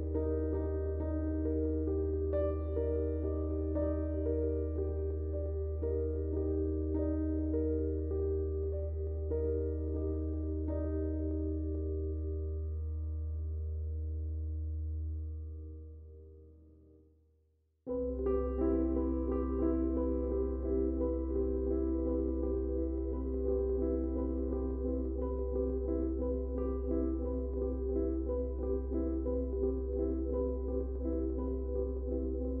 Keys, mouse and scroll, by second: 0.1 click, 2.8-7.4 drag, 3.1 typing, 7.4-10.8 drag, 12.3 Tab, 17.1 click, 22.2 click, 23.8 ctrl+space, 24.4 ctrl+click, 26.4 ctrl+click, 28.8 z, 30.1 ctrl+shift+click, 32.2 space, 32.3-32.6 drag.